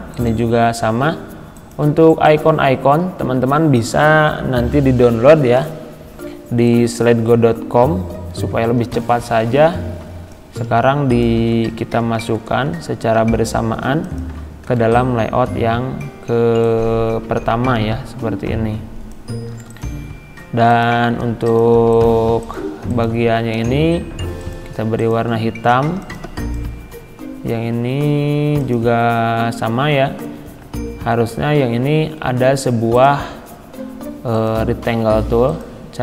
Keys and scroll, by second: 12.0 ctrl+c, 14.7 ctrl+v.